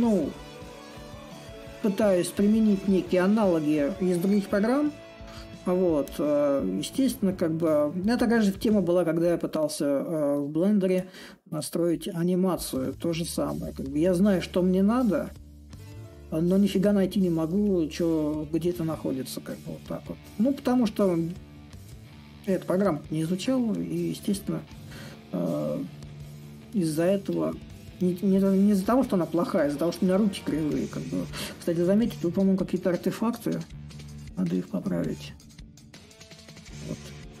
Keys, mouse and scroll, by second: 0.1-2.0 drag, 2.4-4.4 shift+drag, 4.4 s, 5.2-10.2 drag, 10.4-15.4 drag, 17.4-22.4 drag, 22.9-24.3 drag, 26.1 click, 27.4 shift+middle click, 28.0 shift+middle click, 28.6 shift+middle click, 29.3-31.8 drag, 31.9-33.7 drag, 33.9-37.4 ctrl+drag.